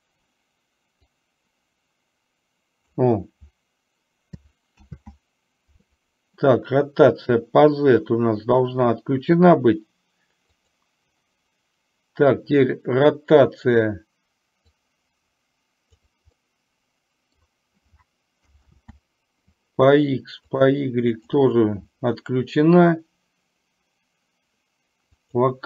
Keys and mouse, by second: 1.1-3.1 drag, 4.9 ctrl+z, 10.6 click, 14.9-16.0 drag, 16.4-17.5 middle drag, 18.8 ctrl+z, 21.1 click, 25.3 click.